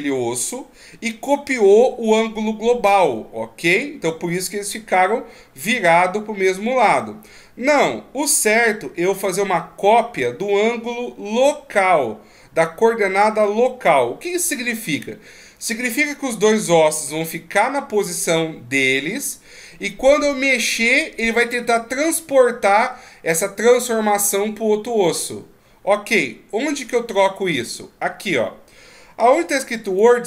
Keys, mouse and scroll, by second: 29.8 click.